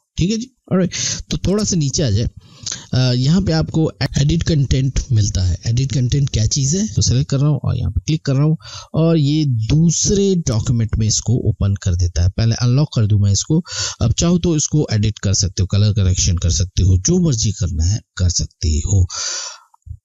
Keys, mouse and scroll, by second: 1.9 scroll up 1, 6.6 click, 12.8 click.